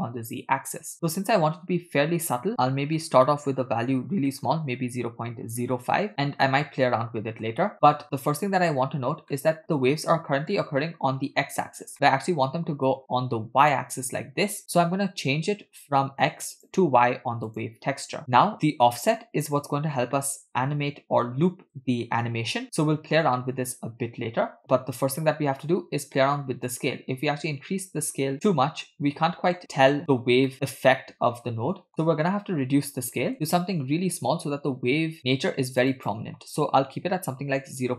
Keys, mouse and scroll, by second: 2.5-3.0 scroll up 2, 3.0-6.0 drag, 6.7-7.4 middle drag, 7.7-8.4 scroll up 2, 7.7-9.0 middle drag, 9.4 middle click, 11.9-12.5 middle drag, 14.6 middle click, 16.6-17.9 drag, 18.2 middle click, 26.7-28.5 drag, 28.9 middle click, 30.5-31.9 middle drag, 33.6-35.9 drag, 35.9-37.9 drag.